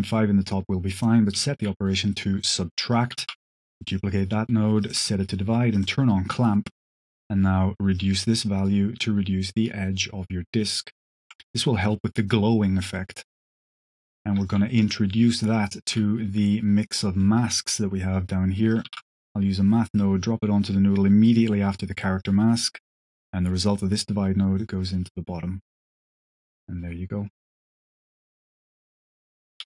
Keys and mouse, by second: 0.8-1.6 drag, 2.3-2.9 drag, 3.2 shift+d, 3.8 click, 4.7 click, 5.7 click, 7.8-11.2 shift+drag, 12.8 drag, 13.9 click, 14.6 click, 15.4 drag, 15.7 g, 17.1 drag, 17.9 click, 18.6 click, 18.8 shift+d, 19.8 click, 21.2-21.6 drag, 22.1 click, 23.0-24.5 drag, 28.1 space, 29.1 middle click.